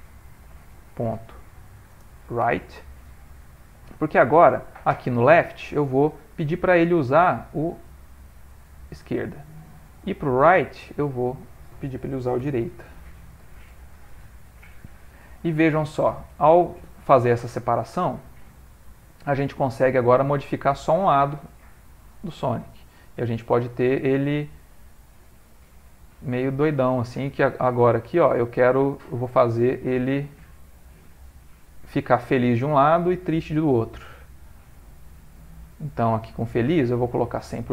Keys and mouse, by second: 5.1 click, 6.1 middle click, 7.1 click, 10.6 click, 11.2 click, 15.4 middle click, 16.6 ctrl+middle click, 18.4 click, 19.3 click, 23.7 click, 25.4 click, 30.6 click, 32.1 click, 34.4 click, 36.5 click.